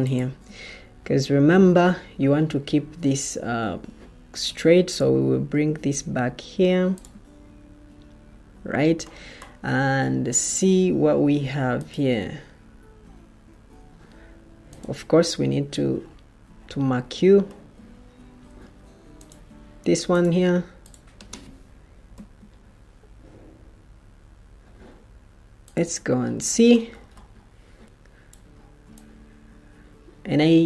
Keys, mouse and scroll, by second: 18.4 Escape, 22.0 F5.